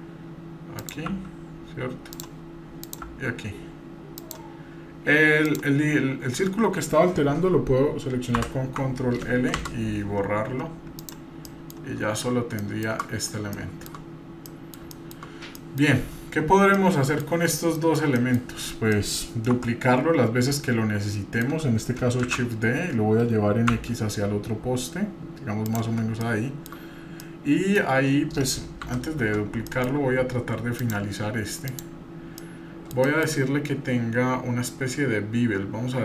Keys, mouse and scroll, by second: 0.8 click, 1.1 g, 2.8 click, 3.0 g, 5.5 click, 9.6 Delete, 11.5-12.0 middle drag, 12.0-12.6 scroll down 2, 12.6 middle click, 13.5-13.9 shift+middle drag, 14.1 scroll up 1, 14.4-14.7 middle drag, 14.9 shift+middle drag, 15.3 scroll up 1, 15.5 middle click, 16.2-16.5 scroll down 3, 16.7-17.2 middle drag, 17.4-17.7 scroll up 1, 17.7 middle click, 18.2 middle click, 18.9 middle click, 20.4 Tab, 20.5-21.6 shift+middle drag, 22.2 shift+d, 26.2-26.7 shift+middle drag, 26.9-27.2 scroll up 1, 27.2-27.8 middle drag, 28.8 Delete, 29.7 shift+middle click, 30.8 click, 31.7 click, 32.4-33.4 middle drag, 33.8-35.4 scroll down 3.